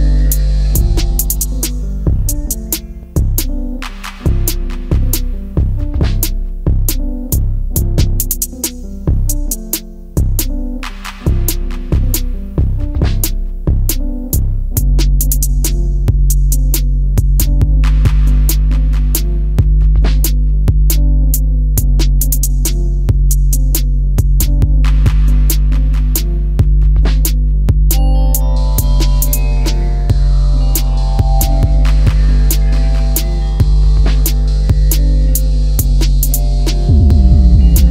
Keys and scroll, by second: 14.6 ctrl+c, 15.1 Escape, 15.6 ctrl+v, 18.0 Up, 22.7 space, 23.4 Delete, 27.8 space, 29.3 Delete, 35.9 alt+t.